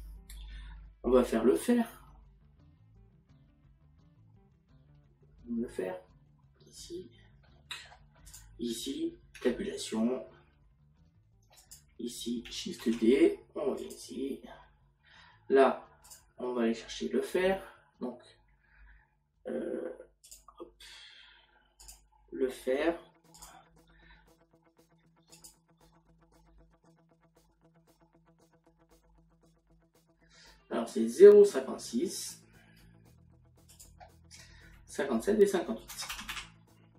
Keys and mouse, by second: 7.5 middle click, 9.3 click, 20.3 click, 23.4 click, 25.4 click, 35.9 KP_0.